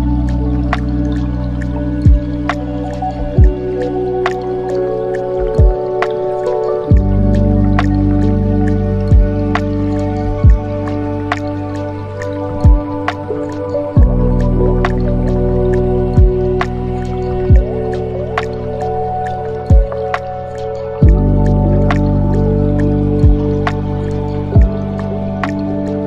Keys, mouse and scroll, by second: 0.8-3.1 drag, 7.4-8.1 drag, 10.4-11.9 drag, 11.9 middle click, 12.9 click, 13.8-16.7 drag, 16.7-17.3 scroll down 4, 17.3-19.5 middle drag, 19.5 click, 22.9-26.0 shift+drag.